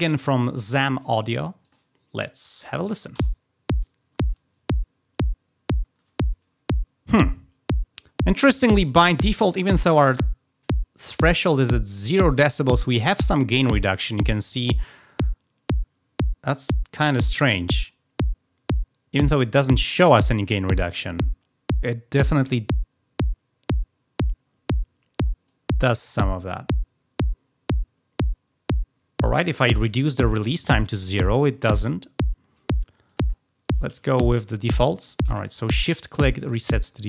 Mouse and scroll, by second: 1.6 click, 11.0 click, 25.4-29.6 drag, 33.0 click, 34.0 shift+click, 34.8 click, 35.0 click, 35.1 click, 35.6 shift+click, 36.2 shift+click, 36.7 shift+click.